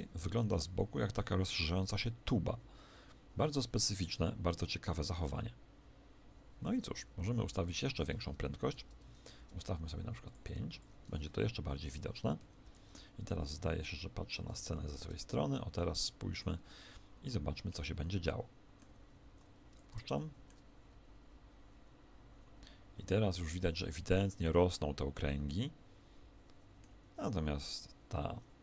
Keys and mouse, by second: 6.9 Escape, 8.5 shift+Left, 10.1 click, 12.5 shift+Left, 12.5-13.5 middle drag, 13.5 KP_1, 14.6-19.8 middle drag, 19.2 alt+a.